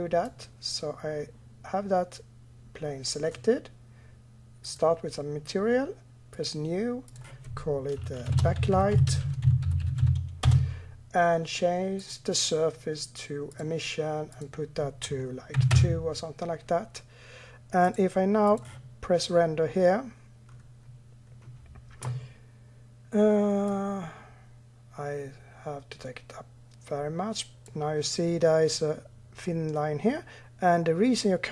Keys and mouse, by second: 4.5-16.3 drag, 17.7 click, 18.7 click, 21.9-23.2 middle drag, 23.5-28.6 drag.